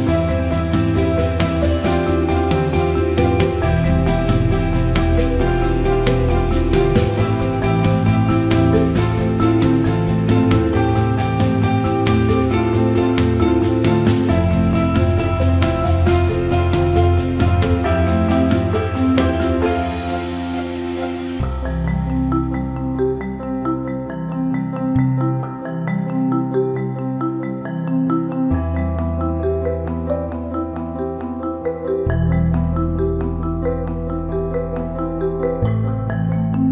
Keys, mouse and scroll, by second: 1.2 click, 3.6 click, 4.8 ctrl+KP_Add, 6.4 click, 7.6 alt+middle click, 12.1 ctrl+z, 15.0 shift+click, 17.1 click, 18.0-22.7 drag, 23.1 alt+middle click, 23.7 alt+shift+middle click, 29.6 alt+middle click, 30.0 click, 30.3-33.1 alt+middle drag, 33.3 ctrl+z, 33.9 middle click.